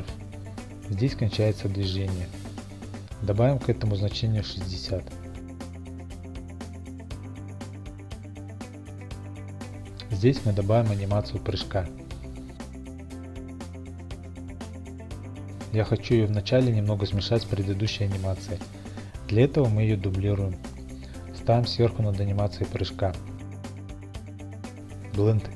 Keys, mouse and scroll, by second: 2.1 click, 2.3-2.8 scroll, 3.1-5.6 drag, 7.6-9.2 drag, 8.1 typing, 8.5 Return, 10.2-11.3 drag, 10.5 typing, 10.8 Return, 12.1 right click, 12.4 click, 13.5 click, 14.0 click, 14.5 s, 15.0 click, 15.4 g, 16.9 click, 18.3 click, 19.9 d, 22.7 click, 23.5 n, 25.2 click.